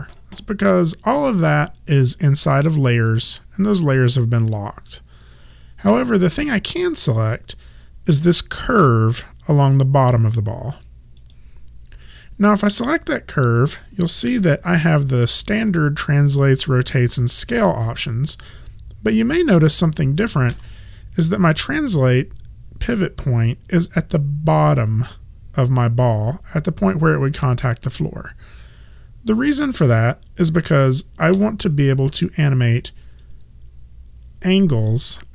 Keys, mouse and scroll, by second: 11.2 click, 20.5 w, 31.4 e, 33.2 click.